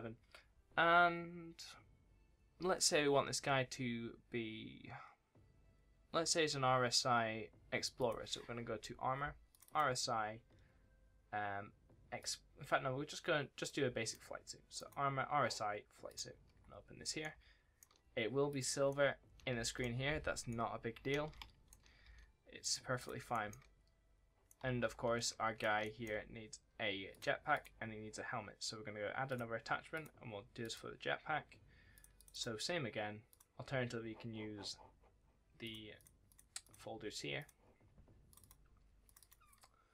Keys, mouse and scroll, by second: 17.1 right click, 17.2 w, 17.5 scroll up 1, 17.7 w, 18.4 click, 18.8 right click, 19.0 w, 19.1 scroll up 1, 19.4 scroll down 1, 19.4 s, 20.4 right click, 20.6 scroll up 1, 20.9 scroll down 1, 21.1 s, 21.5 scroll up 1, 21.6 w, 22.5 click, 23.2 right click, 23.3 a, 24.4 right click, 24.5-26.4 typing, 25.2 scroll up 1, 25.7 right click, 27.0 click.